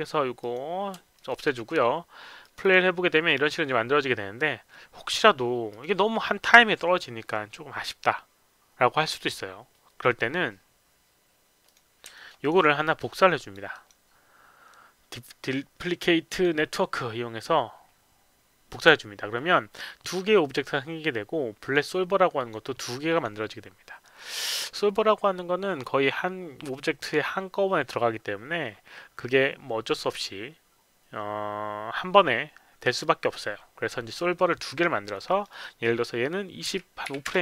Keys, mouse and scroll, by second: 0.4 click, 1.2 alt+middle click, 2.4 click, 2.6 click, 3.3 click, 5.7 click, 11.6 click, 12.1 alt+middle click, 12.4 alt+right click, 13.4 click, 13.7 right click, 16.3 click, 21.6 click, 22.4 click, 23.1 click, 24.0 click, 35.3 click, 35.5 click, 36.7 KP_2, 37.0 KP_5.